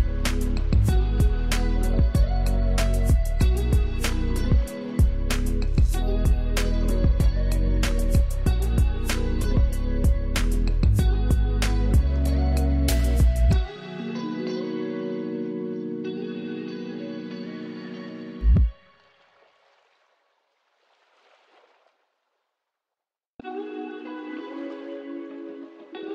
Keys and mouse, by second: 1.7 ctrl+space, 2.1 ctrl+alt+click, 4.5 ctrl+space, 4.8 ctrl+click, 5.1 ctrl+space, 7.4 click, 11.2 click, 11.9 ctrl+z, 13.0-16.4 drag, 16.8-26.1 drag.